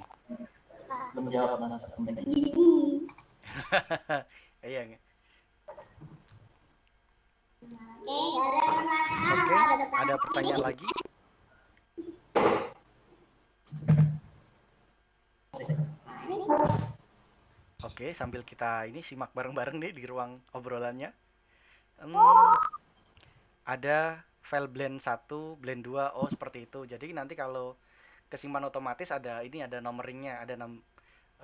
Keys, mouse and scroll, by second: 2.9 scroll up 1, 3.1-31.4 middle drag.